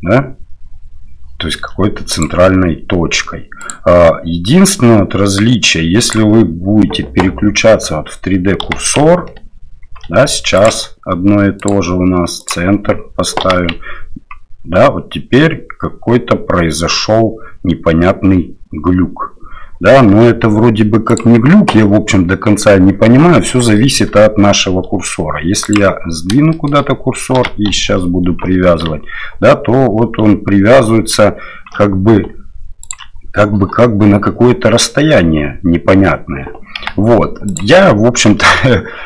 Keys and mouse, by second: 3.6-6.2 drag, 8.6 g, 11.6-12.7 drag, 13.4 g, 23.7 shift+middle drag, 26.5 shift+click, 27.4 g, 36.8 g, 38.4 shift+middle click.